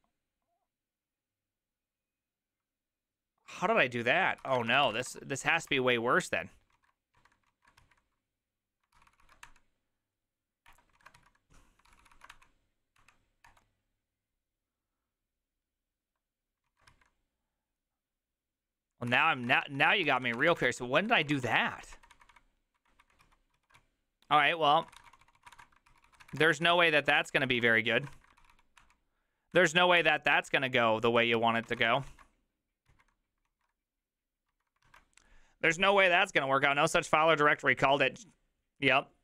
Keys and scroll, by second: 0.0-0.2 typing, 4.3-5.7 typing, 5.7 Return, 6.7 ctrl+a, 7.1-8.3 typing, 8.9 ctrl+c, 9.1 ctrl+c, 9.2 ctrl+c, 9.4 Up, 10.7 Return, 10.9 ctrl+a, 11.1 4, 11.9 ctrl+c, 12.0 ctrl+c, 12.1 ctrl+c, 12.3 Up, 13.0 Up, 13.4 Return, 16.9 ctrl+a, 16.9 3, 19.1 ctrl+a, 19.1 ctrl+c, 19.2 ctrl+c, 19.6-21.3 typing, 20.1 ctrl+c, 21.3 Return, 21.5 ctrl+d, 21.6 ctrl+d, 22.0 ctrl+d, 23.2 ctrl+d, 23.2 ctrl+u, 23.6 ctrl+u, 23.8-26.8 typing, 27.2 ctrl+c, 27.5 ctrl+c, 28.0 ctrl+a, 28.2 3, 28.4 ctrl+c, 28.8 Up, 29.5 Up, 30.0 Return, 31.1 ctrl+a, 31.4 ctrl+a, 31.7 ctrl+a, 31.9 ctrl+a, 32.1 ctrl+a, 32.9 ctrl+a, 33.5 ctrl+a, 34.5 ctrl+a.